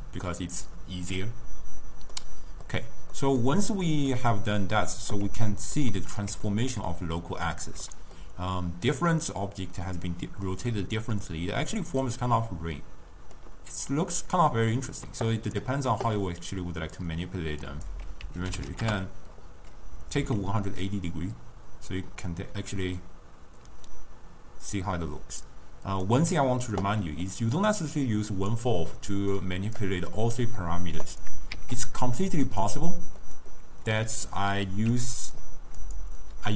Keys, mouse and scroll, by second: 2.2-14.1 middle drag, 14.2-16.2 drag, 16.2-17.7 middle drag, 17.7-20.2 drag, 20.2 s, 27.3 middle click, 28.1 click, 29.4 click, 31.2 click, 31.9 shift+d, 33.2 middle click, 34.0-35.4 drag, 36.3 click.